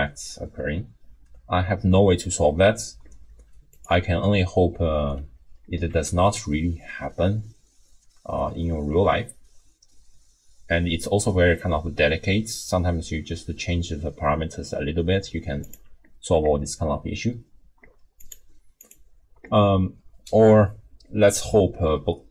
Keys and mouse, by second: 5.9 r, 18.2 click, 18.8 click.